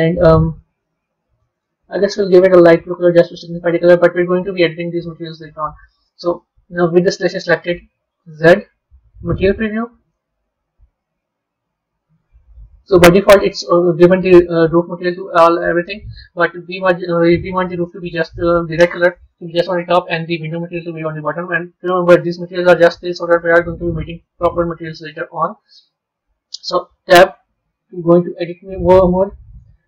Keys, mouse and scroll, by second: 1.5 click, 8.1 z, 12.8-15.8 middle drag, 18.9-24.2 middle drag, 25.0-26.9 middle drag, 26.9 b, 27.6-29.1 middle drag, 29.8 middle click.